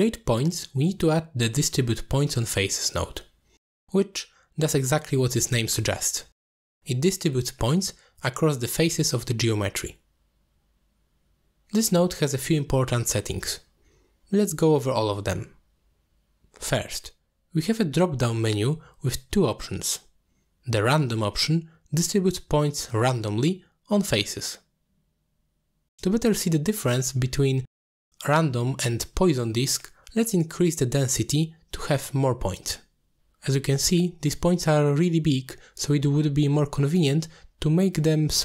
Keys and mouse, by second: 1.2 middle click, 2.6-7.7 drag, 10.0 click, 11.1 click, 12.0 middle click, 12.8-14.2 drag, 15.9-17.4 drag, 18.4-18.9 middle drag, 21.0-24.1 drag, 24.8-29.1 drag, 30.9-32.7 drag, 33.2-36.1 drag, 34.3 0, 34.4 0, 36.6-37.4 middle drag, 38.3 middle click.